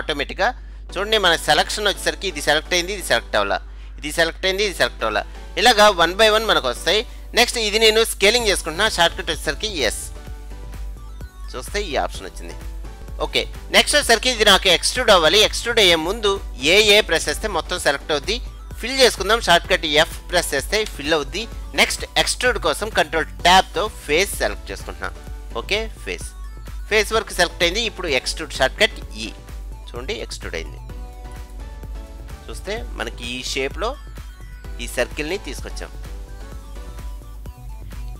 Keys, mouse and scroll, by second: 0.9-2.9 middle drag, 5.5-7.5 middle drag, 10.2 s, 13.0 middle click, 13.0-13.7 scroll down 1, 14.2-16.1 middle drag, 14.2-15.9 scroll up 1, 15.9 scroll up 1, 16.8 a, 17.1 a, 20.9 f, 23.6 ctrl+Tab, 26.1-28.0 right drag, 29.3 e, 32.1-34.0 middle drag.